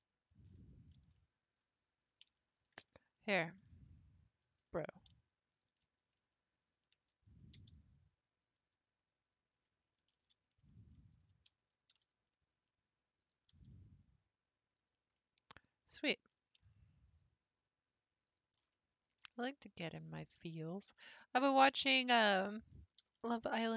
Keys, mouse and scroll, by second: 0.8 alt+click, 1.2-2.5 middle drag, 2.5 alt+click, 3.4 g, 4.9 scroll up 2, 5.5 alt+click, 6.7 ctrl+click, 7.5 g, 10.2 ctrl+z, 11.1 shift+click, 11.9 g, 13.5 g, 15.2-17.1 middle drag, 17.1 click, 18.3 click, 18.7 middle click, 19.6 click, 20.7 click, 22.4 middle click, 23.0 g.